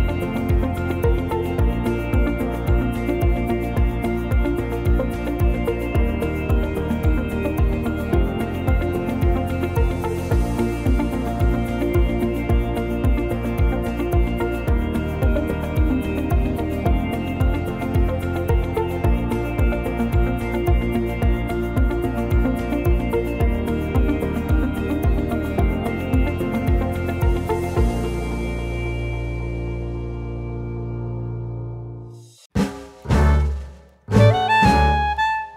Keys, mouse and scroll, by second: 0.4 click, 0.8 scroll up 1, 1.0 shift+middle click, 1.4-2.1 scroll up 1, 2.2 Tab, 2.6 click, 5.0 click, 6.8 Tab, 7.1 click, 7.9 click, 8.3 right click, 8.9 click, 9.6 click, 10.6 right click, 12.3 click, 13.8-14.5 scroll down 4, 14.3-15.0 scroll up 2, 15.1 click, 17.6 scroll down 3, 17.8 click, 18.3 middle click, 19.2 scroll down 1, 19.7 middle click, 20.3-20.6 scroll up 2, 21.6 click, 21.9-22.2 scroll up 3, 22.8 click, 23.6 click, 24.5 click, 25.0 click, 26.0 click, 27.9-28.4 scroll down 3, 28.1 click, 28.4 middle click, 29.0 click, 29.4 middle click, 29.8-30.2 scroll down 1, 30.2 shift+middle click, 30.6 middle click, 32.0 click, 32.4 shift+middle click, 32.8 scroll up 1, 33.1 shift+middle click, 34.2 ctrl+s.